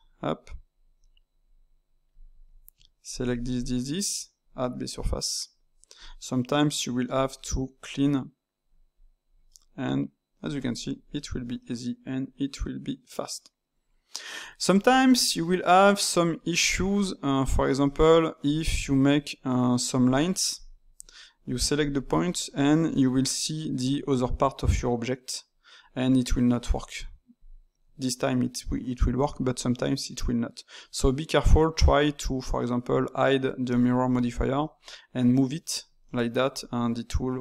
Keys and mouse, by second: 0.0-2.3 typing, 0.6 click, 1.4 click, 2.0 click, 3.0 click, 3.2 shift+click, 3.5 shift+click, 4.3-6.0 drag, 7.2 middle click, 7.8 click, 8.9 click, 9.4-19.8 middle drag, 19.8 d, 20.0 click, 20.3 d, 20.5 click, 20.8 d, 21.4 click, 21.6 shift+click, 21.9 shift+click, 22.2-25.9 middle drag, 27.3-30.3 drag, 30.7-32.8 middle drag, 32.8 click, 33.7 click, 34.6-37.4 middle drag.